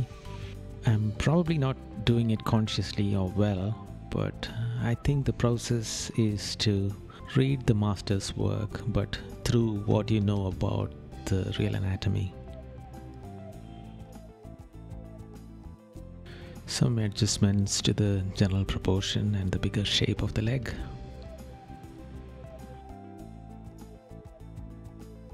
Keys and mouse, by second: 1.0 right click, 1.7 right click, 4.1 right click, 5.1 right click, 6.9 right click, 10.6 right click, 13.9 right click, 19.1 right click, 21.8 right click, 23.9 right click.